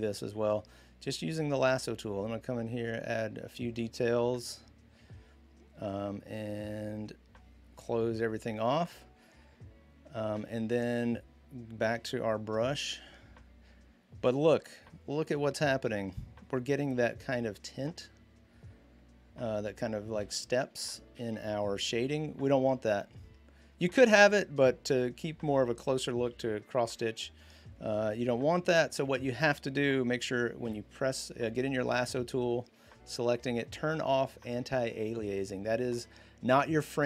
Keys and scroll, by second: 10.1 v, 11.6-12.8 typing, 20.0 ctrl+d, 20.8 z, 26.1 ctrl+z, 26.8 ctrl+z, 30.4 i.